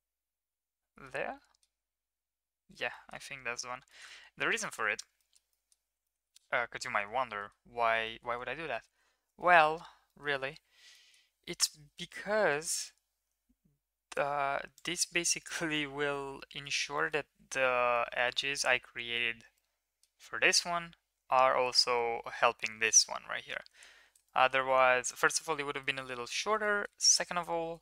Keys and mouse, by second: 1.5 click, 3.1 click, 3.9 shift+drag, 4.6 shift+middle drag, 5.2 middle drag, 5.5 middle click, 6.0 shift+middle drag, 7.2-7.5 shift+middle drag, 8.0 shift+middle drag, 10.2 middle click, 11.0 middle click, 11.9 e, 15.7-16.7 middle drag, 17.1 shift+middle click, 18.0 middle click, 19.0 middle click, 19.7-20.1 middle drag, 22.6-23.0 middle drag, 24.2-24.6 shift+middle drag, 25.1 shift+middle click, 26.0 middle click, 26.6 shift+middle drag.